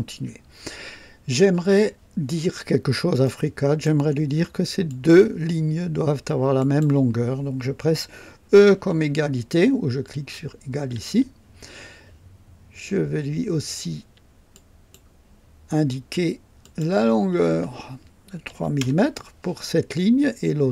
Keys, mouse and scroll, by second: 3.2-4.0 right drag, 4.8 click, 6.5 click, 10.7 e, 14.5 click, 16.6 click, 18.5 KP_3, 18.7 KP_Enter.